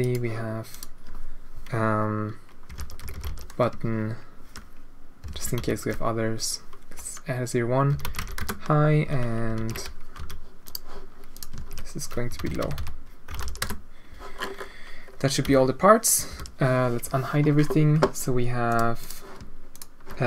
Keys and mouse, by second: 0.7-3.8 right drag, 3.1 t, 3.8-9.2 shift+drag, 9.5 ctrl+c, 10.1 h, 10.6 click, 11.3-14.1 ctrl+drag, 12.4 BackSpace, 13.2 BackSpace, 15.4 h, 16.3 alt+h, 18.6 click, 19.0 click, 19.7 shift+click.